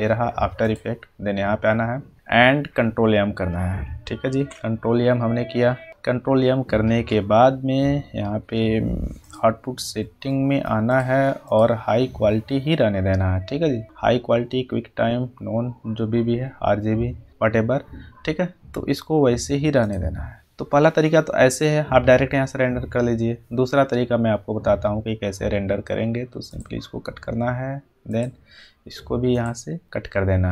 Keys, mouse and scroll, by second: 0.8 click, 4.2 click, 4.3 ctrl+m, 9.2 click, 19.8 click, 26.4 click, 26.6 click, 28.1 click.